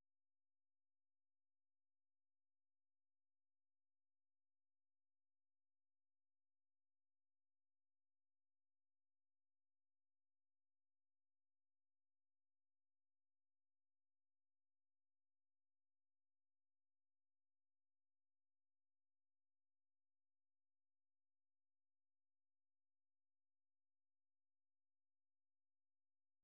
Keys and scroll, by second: 0.0-1.7 typing, 2.9 k, 3.2 k, 3.4 k, 4.7 k, 6.1 super+2, 7.3 F6, 7.4-9.8 typing, 12.9-14.2 typing.